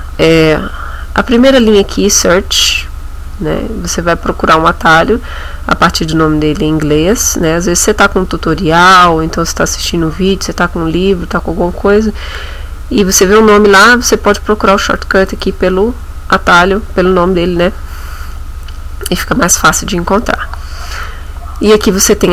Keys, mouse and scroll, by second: 5.4-5.9 scroll down 1, 6.2-6.6 scroll down 1, 6.7-7.0 scroll up 1, 7.3-8.1 scroll up 2, 15.3 click.